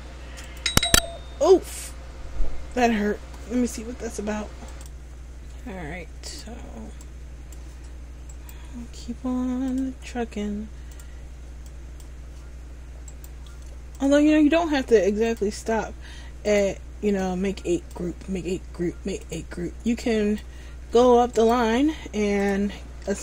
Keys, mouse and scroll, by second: 0.5 click, 4.9 middle click, 6.4 click, 8.5 right click, 9.8 click, 13.2 right click, 14.0 click, 16.6 click, 21.5 right click, 22.5 click.